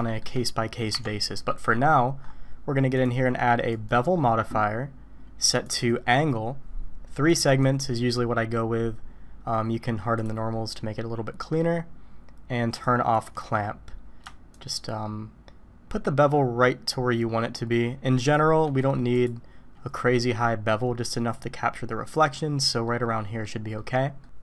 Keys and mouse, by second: 0.1 shift+middle click, 0.9 Tab, 1.4 middle click, 3.1-3.9 drag, 5.6 click, 7.5 click, 10.2 click, 10.5-11.1 middle drag, 11.1 drag, 11.4 middle drag, 12.9 click, 14.7-18.5 shift+drag, 22.9-23.5 middle drag, 23.8 middle drag.